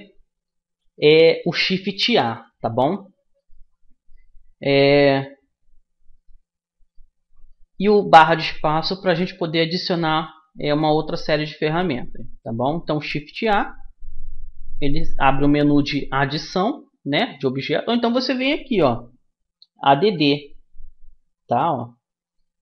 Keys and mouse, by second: 1.6-3.2 middle drag, 3.3 a, 4.1 middle click, 4.3 middle click, 6.6 middle click, 6.9 right click, 7.3-9.6 middle drag, 11.1-15.0 middle drag, 15.0 shift+a.